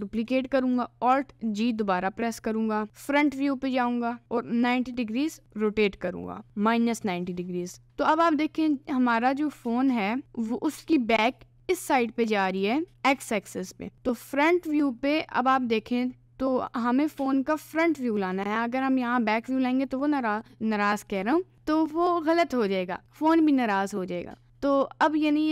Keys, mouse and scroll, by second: 0.2 shift+d, 1.6 alt+g, 3.2 click, 3.7 a, 4.2 r, 6.6 middle click, 6.9 scroll up 1, 7.0 middle click, 7.3 middle click, 7.8-8.7 scroll up 1, 8.7-11.4 scroll up 1, 11.4 click, 12.0 click, 14.2 middle click, 15.0 middle click, 15.2 middle click, 15.8 middle click, 16.8 middle click, 19.4-20.4 middle drag, 23.0 middle click, 23.8 middle click.